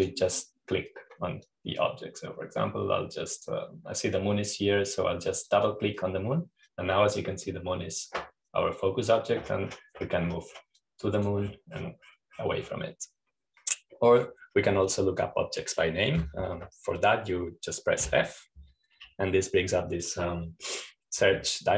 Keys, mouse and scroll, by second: 1.3 click, 3.0-6.2 drag, 7.0-9.2 drag, 12.3-14.6 drag, 15.2-16.0 scroll up 1, 16.4-17.9 drag, 19.6 f.